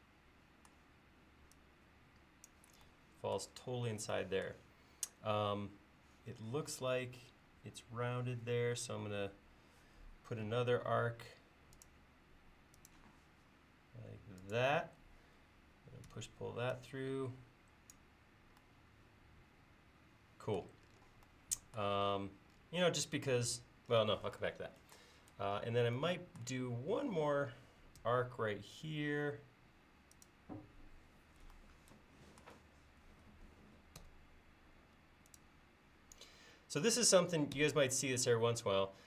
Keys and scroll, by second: 10.8 a, 16.2 p, 28.0 a, 34.0 Escape, 37.6 Escape.